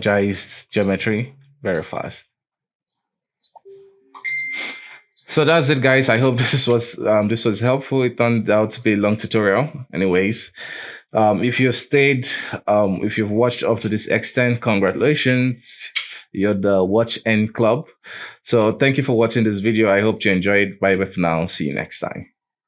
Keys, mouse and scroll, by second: 0.5-1.5 scroll up 4, 1.5-4.8 middle drag, 4.8-5.4 scroll down 5, 5.4-5.9 middle drag, 5.9 KP_1, 11.5 KP_7.